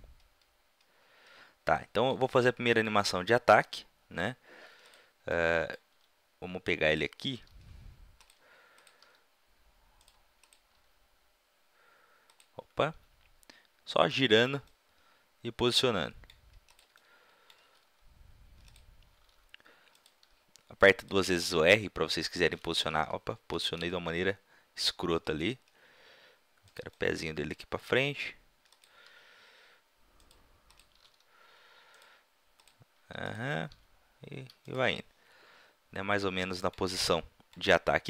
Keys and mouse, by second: 4.9-6.4 drag, 6.0 r, 7.4 g, 8.3 drag, 8.6-10.0 drag, 9.0 r, 10.4 click, 10.8 g, 11.6 click, 11.7 right click, 12.5 drag, 12.5-14.2 right drag, 13.0 g, 14.4-14.7 drag, 17.6 r, 18.5 middle click, 18.8-20.0 right drag, 19.2 r, 20.0-20.3 drag, 20.2 g, 21.5 r, 22.2 click, 22.9 ctrl+z, 23.2 ctrl+z, 23.9 r, 26.7 click, 27.8 g, 29.0 r, 30.2 middle click, 30.5 click, 31.1 g, 31.9 click, 32.4 click, 33.6 click, 33.7 g, 34.7-36.7 middle drag, 37.0-37.3 middle drag.